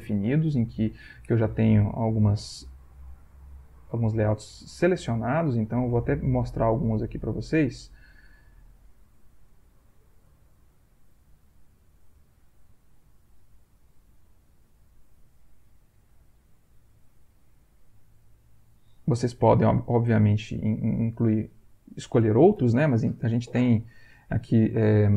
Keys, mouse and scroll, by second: 3.2 click, 4.9 click, 5.6 click, 9.3 click, 10.4 click, 11.6 click, 12.5 click, 14.1 click, 14.9 click, 16.0 click, 16.9 click, 18.7-20.0 drag, 20.8 click, 22.6 Return, 24.7 Right.